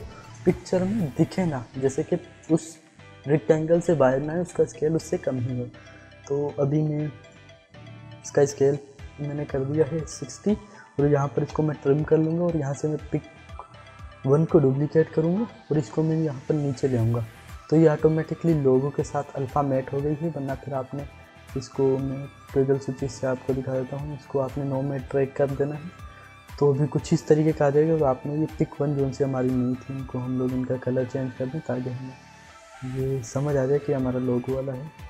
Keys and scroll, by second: 9.7 s, 11.3 alt+[, 14.5 ctrl+d.